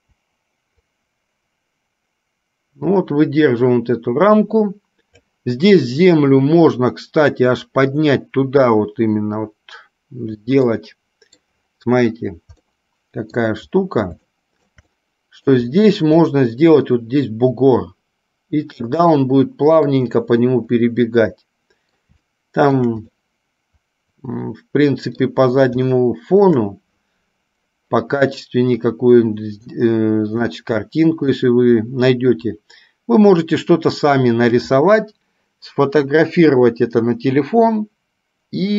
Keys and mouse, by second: 0.0 i, 1.3 Delete, 1.3-5.4 drag, 11.0-11.6 middle drag, 12.9 middle click, 14.5 shift+middle click, 15.0 middle click, 19.3-20.3 middle drag, 21.1-22.3 middle drag, 22.5 shift+middle click, 23.4-25.4 middle drag, 26.0-26.6 shift+middle drag, 30.6-31.6 middle drag.